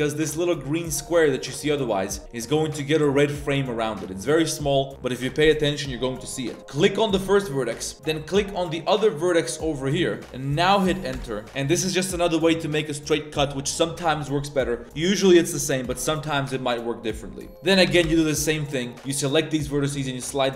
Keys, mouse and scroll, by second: 17.8 g.